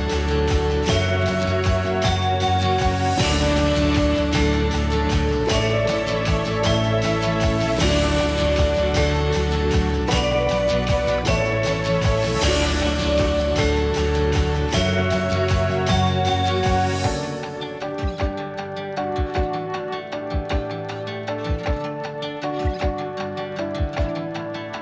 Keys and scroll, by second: 0.7 ctrl+z, 1.5 Escape, 2.3 ctrl+z, 2.8 Escape, 3.4 ctrl+x, 7.9 m, 8.5 Delete, 10.8 p, 11.8 Escape, 12.2 Escape, 12.3 Escape, 12.4 Escape.